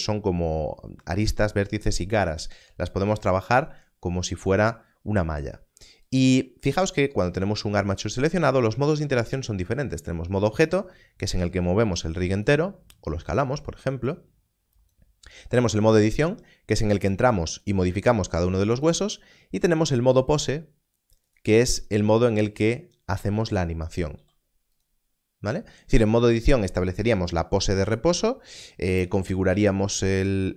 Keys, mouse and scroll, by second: 6.0 Tab, 7.7 click, 11.2 click, 12.3 right click, 14.0 s, 14.7 click, 22.1 click, 22.1 r, 23.1 click, 24.6 r, 24.7 click.